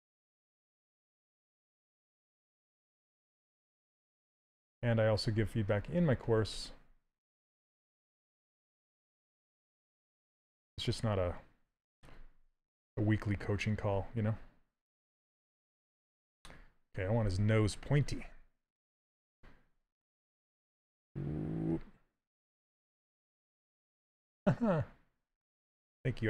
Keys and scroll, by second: 0.5 s, 17.7 s.